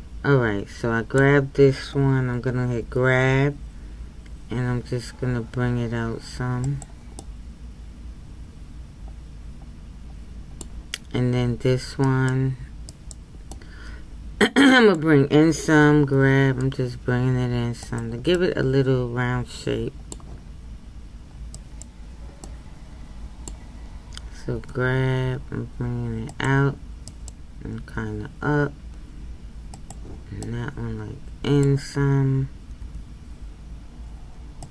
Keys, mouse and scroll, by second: 2.8 g, 7.2-10.2 middle drag, 12.0-13.5 right drag, 13.5-16.0 middle drag, 16.0 g, 18.3-21.5 middle drag, 21.5 right click, 22.4-24.5 middle drag, 24.5 g, 27.1 right click, 27.8 g, 30.4-32.8 middle drag, 32.8 g.